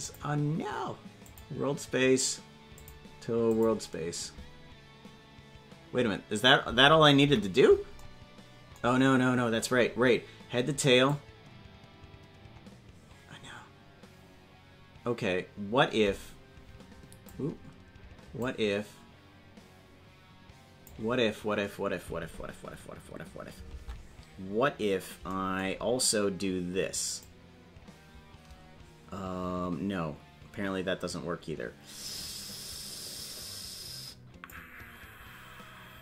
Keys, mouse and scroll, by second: 0.0 click, 2.7 click, 7.2 KP_Decimal, 9.1-9.5 scroll down 3, 11.1-17.3 drag, 18.4-20.9 drag, 24.6 scroll down 2, 25.7-26.1 scroll down 3, 27.2-34.5 drag, 35.5 scroll up 2.